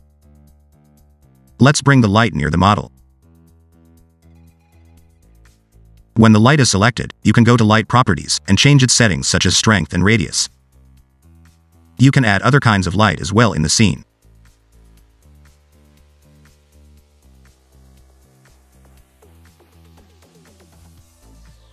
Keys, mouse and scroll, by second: 0.8-1.2 scroll up 3, 1.2 g, 2.5 g, 4.0 g, 5.1-5.8 scroll up 3, 5.8 scroll down 1, 5.9 middle click, 6.1 middle click, 6.5-7.3 scroll down 2, 9.4 click, 9.8 0, 10.8 click, 13.5 shift+a, 17.2-17.6 scroll up 3, 17.6 middle click, 20.5-20.8 scroll up 3, 20.8 click, 21.4 right click.